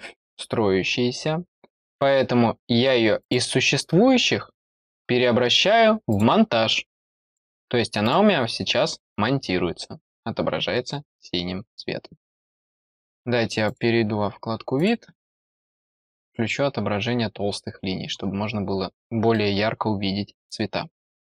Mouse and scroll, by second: 3.1 click, 6.0 click, 7.2 click, 7.9 click, 13.6 click, 14.7 click, 16.1 click, 17.4-18.1 scroll up 1, 18.1 scroll down 1, 18.9 middle click.